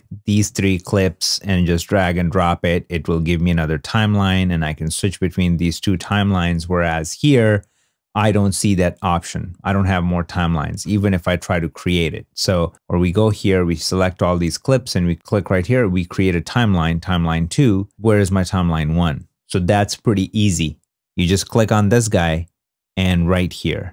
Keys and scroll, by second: 5.9 super+Tab.